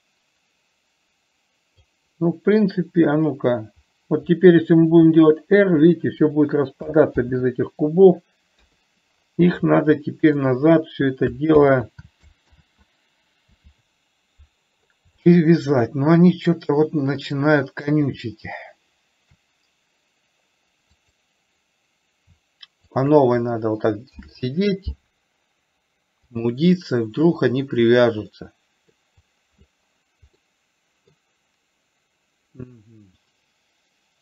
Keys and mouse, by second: 5.4 r, 7.6 ctrl+z, 9.1 KP_3, 10.3 shift+middle click, 11.9 ctrl+z, 12.9 ctrl+z, 15.7 shift+middle click, 16.7 click, 21.4 click, 23.3 shift+click, 24.4 ctrl+p, 28.7-29.3 middle drag, 30.8 middle click.